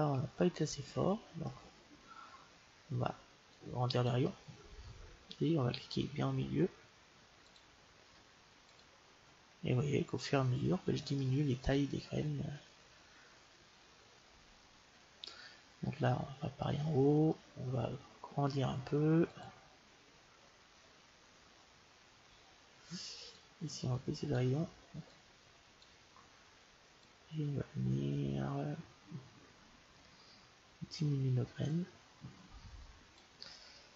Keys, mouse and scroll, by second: 3.5-5.4 drag, 7.8-10.6 drag, 11.1-13.1 middle drag, 16.6-18.7 middle drag, 19.6-21.1 drag, 23.3-27.0 drag, 27.3-29.0 drag.